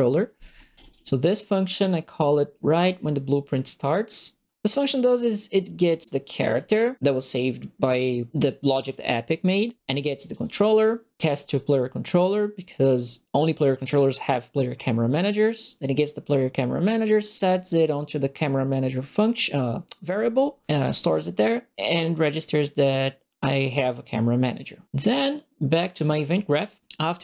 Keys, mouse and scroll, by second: 0.9 click, 2.2 right click, 2.8 middle click, 3.5 right click, 4.6 right click, 6.4 click, 7.9 click, 10.2 click, 11.2 click, 15.5 right click, 17.3 click, 25.9 click.